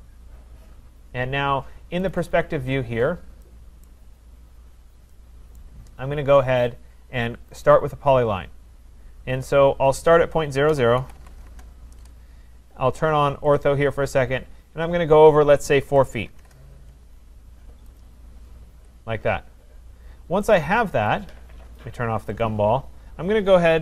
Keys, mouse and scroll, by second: 2.1 click, 2.3 click, 2.9-3.5 scroll, 3.5 scroll, 3.9 right click, 4.1-5.1 scroll, 5.1 scroll, 5.6 right click, 7.7 click, 10.7 click, 10.7-11.7 typing, 13.6 click, 15.7-16.4 typing, 18.0 Return, 18.0 click, 18.8 Return, 20.6 click, 22.4 click.